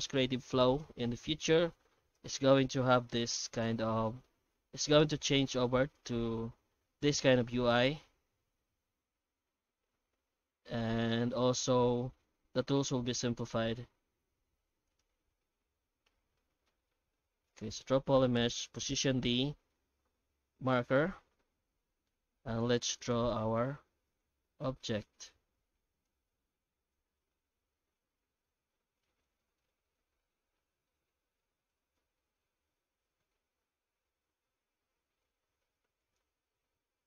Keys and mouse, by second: 2.5 shift+q, 5.2 shift+q, 16.6 ctrl+shift+x.